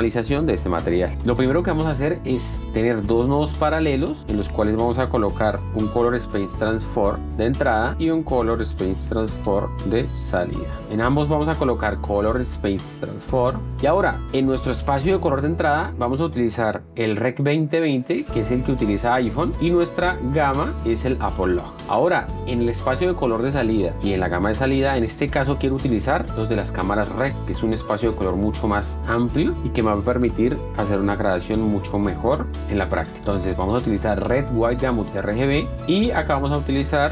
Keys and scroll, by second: 3.3 alt+s, 5.0 F2, 6.2-10.1 typing, 14.7 F1, 23.1 F1, 26.4 r, 31.9 F1.